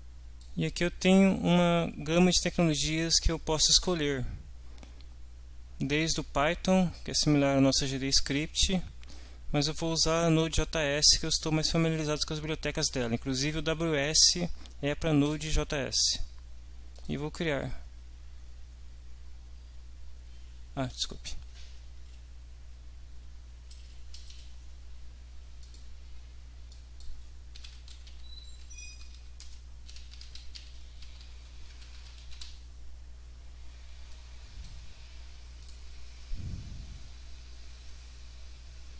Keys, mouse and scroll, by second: 15.2 click, 16.9 click, 21.0 click, 22.0 Delete, 22.2 Right, 24.1 Left, 24.3 Delete, 25.6 click, 26.8 click, 27.3-32.9 typing, 34.1 click, 35.6 click.